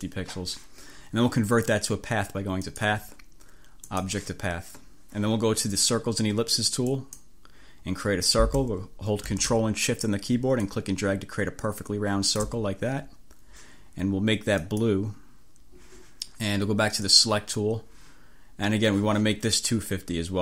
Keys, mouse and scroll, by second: 2.7 click, 3.9 click, 7.0 click, 10.6-12.8 ctrl+shift+drag, 14.7-15.1 scroll up 2, 17.2 click.